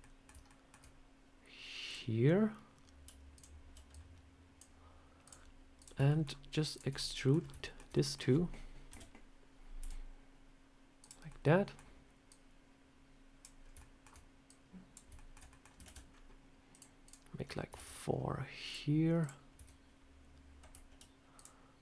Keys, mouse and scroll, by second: 0.3 shift+middle click, 1.7 click, 3.2 alt+click, 3.8 click, 5.1 click, 5.2 alt+click, 5.6 click, 5.7 alt+click, 5.9 shift+middle click, 6.6 click, 6.6 shift+click, 6.8 middle click, 7.2 scroll down 2, 7.5 shift+middle click, 7.8 middle click, 8.8 KP_7, 9.7 e, 11.1 middle click, 12.1 click, 13.5 scroll up 2, 13.6 shift+middle click, 14.3 click, 15.0 shift+middle click, 15.4 middle click, 15.7 ctrl+r, 17.6 ctrl+r, 21.2-21.8 alt+shift+click.